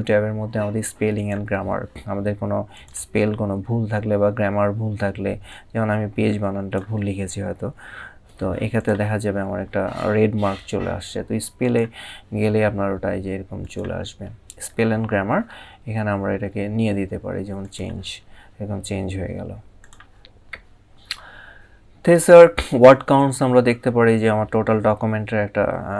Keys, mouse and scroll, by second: 0.8 click, 2.4 click, 5.1 click, 8.5 click, 11.3 click, 13.3 click, 14.6 scroll down 1, 17.3 click, 19.5 click, 22.9 click.